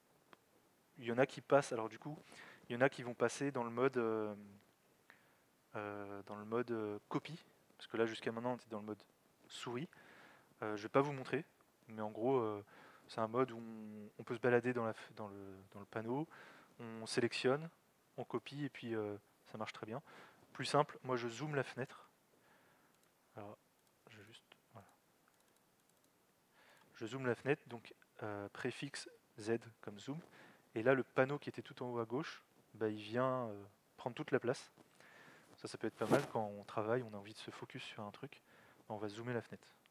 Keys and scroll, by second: 28.5 alt+x, 39.8 alt+x.